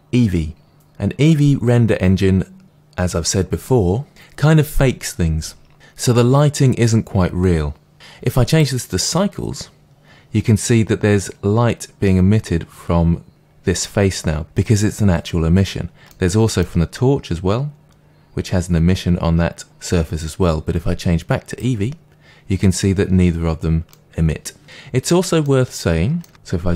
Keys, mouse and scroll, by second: 8.4-16.0 drag, 16.0-21.4 middle drag, 21.4-23.8 drag, 23.8-26.7 middle drag.